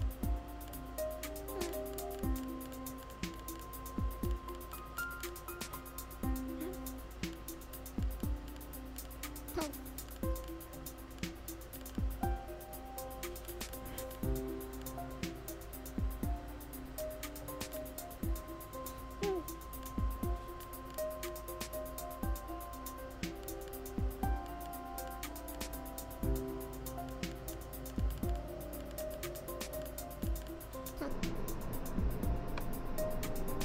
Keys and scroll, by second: 19.0 super+z.